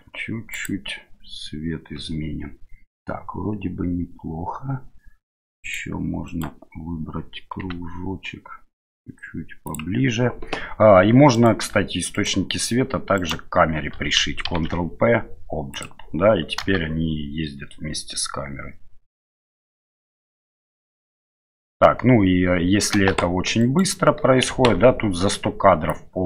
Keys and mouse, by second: 5.7 right click, 6.3 right click, 7.6 s, 11.3 right click, 12.1 shift+right click, 13.2 shift+right click, 14.4 ctrl+p, 16.6 space, 23.0 space, 24.7 ctrl+z, 25.9-26.2 drag.